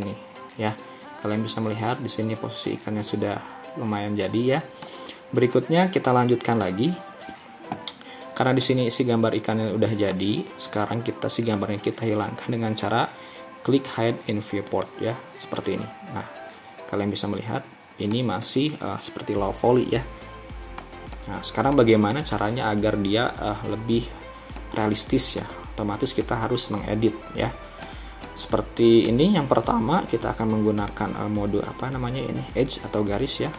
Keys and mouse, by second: 0.0-4.9 middle drag, 5.6-6.7 middle drag, 8.7-10.2 middle drag, 15.6-18.2 middle drag, 18.5-20.9 middle drag, 21.2-22.2 middle drag, 24.6 middle click, 26.3-28.0 middle drag, 28.3 middle click.